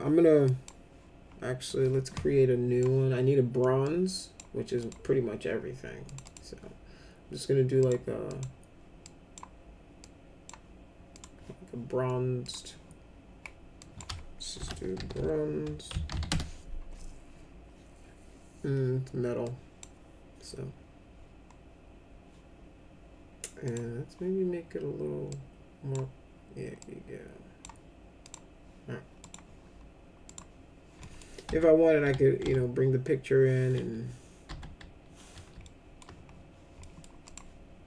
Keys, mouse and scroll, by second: 0.5 click, 1.7-2.8 drag, 3.8 click, 4.8 click, 6.0 click, 6.2 click, 7.8 click, 8.3 click, 9.0 click, 10.0-10.4 drag, 11.1 click, 12.4 click, 13.8 click, 14.3-16.6 typing, 19.4 click, 23.6 click, 25.3 click, 26.8 click, 28.2 click, 29.2 click, 30.2 click, 31.0 middle click, 31.5 F4, 32.0 F3, 32.4 F3, 34.5 F4, 35.6 alt+middle click, 36.8 middle click, 37.2 click.